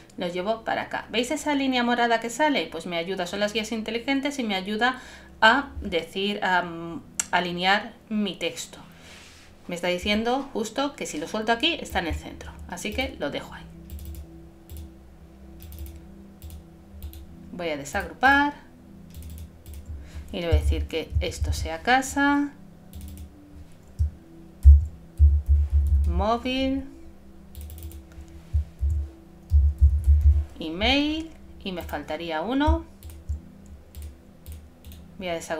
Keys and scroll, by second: 20.6 shift+c, 21.2 shift+a, 24.6 shift+m, 25.2 shift+´, 28.8 shift+e, 29.5 shift+-.